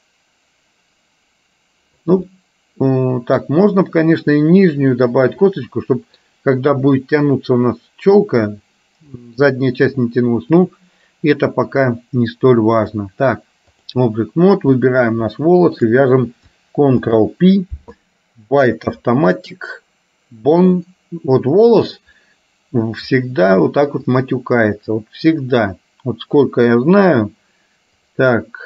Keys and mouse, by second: 2.3-3.5 middle drag, 5.8 middle click, 9.2 middle click, 10.6-14.2 drag, 14.8 click, 15.8 shift+click, 17.1 ctrl+p, 23.3 middle click, 24.2 click, 28.1 click.